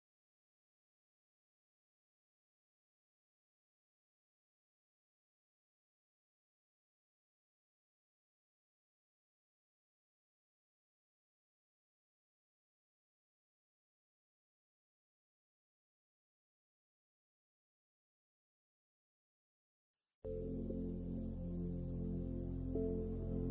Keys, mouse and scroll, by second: 0.4-0.8 scroll down 3, 0.8 shift+middle click, 1.4 middle click, 3.4 ctrl+e, 4.4 middle click, 5.4 l, 6.0 middle click, 7.8 l, 8.8 middle click, 9.3 shift+middle click, 10.0 u, 10.2 u, 10.9-11.3 scroll down 3, 11.3 shift+middle click, 12.6 shift+middle click, 13.0 middle click, 14.2 h, 14.7 shift+middle click, 15.1 middle click, 15.7 shift+middle click, 16.3 middle click, 17.5 scroll up 2, 17.8 shift+middle click, 18.1 middle click, 19.0 scroll up 4, 19.6 middle click, 22.8 alt+click.